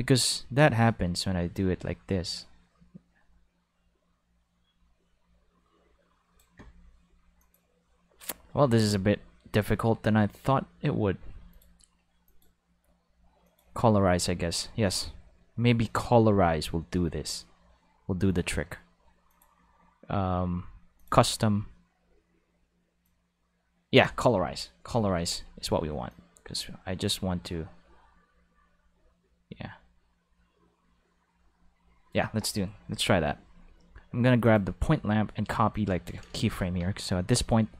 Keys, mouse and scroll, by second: 7.4 click, 10.3 click, 11.5 click, 12.2 click, 13.4 click, 13.5 5, 19.3 click, 21.0 click, 23.0-24.0 drag, 24.3 alt+a, 24.5 5, 25.1 ctrl+5, 26.1 click, 34.4 click, 35.7 click, 37.3 right click.